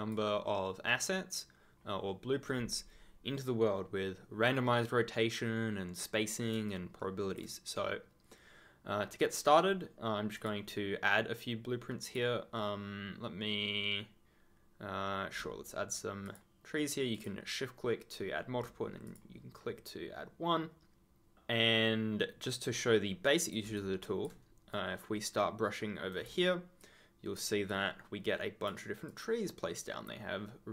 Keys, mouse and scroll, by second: 6.6 ctrl+click, 10.3 click, 12.0 click, 16.2 shift+click, 17.1 shift+click, 19.0 click, 23.2 click, 23.7 ctrl+click, 24.0 ctrl+scroll down 1, 24.7 right click, 26.8 ctrl+click, 27.8 ctrl+scroll up 1, 29.2-29.6 ctrl+scroll up 1.